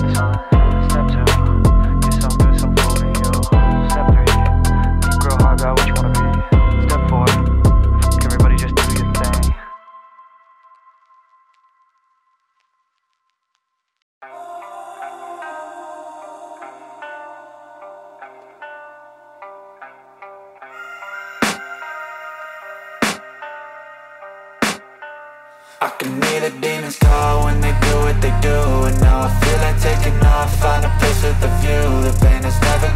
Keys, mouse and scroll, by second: 0.0 ctrl+click, 0.2 ctrl+double click, 0.4 ctrl+click, 1.6 space, 7.3 space, 8.2 space, 8.2 double click, 8.6 space, 9.0 alt+click, 9.2 alt+double click, 10.2 ctrl+click, 10.3 ctrl+double click, 14.9 right click, 16.3 double click, 20.1 space, 20.2 alt+click, 20.3 alt+double click, 20.6 alt+click, 21.3 space, 22.0 ctrl+click, 22.3 ctrl+right click, 29.0 space, 29.1 alt+click, 29.6 right click, 30.5 double click, 32.2-32.9 typing.